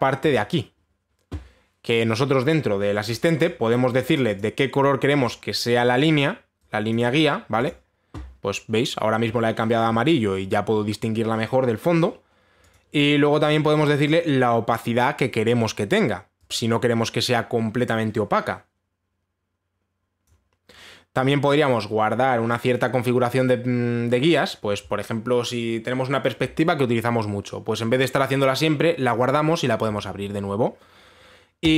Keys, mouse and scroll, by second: 0.0-0.7 scroll down 1, 0.7 click, 0.7-2.4 scroll up 1, 4.6 click, 5.0 click, 6.4 click, 7.5 click, 8.3 click, 13.3 click, 15.8 click, 20.8 click.